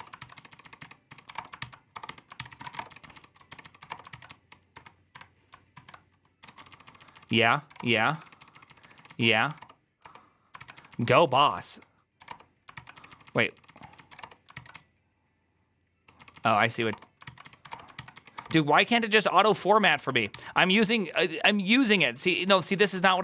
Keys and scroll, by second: 0.0-5.0 typing, 2.2 ctrl+c, 5.6 ctrl+o, 6.3-23.2 typing, 9.9 Return, 18.6 ctrl+c.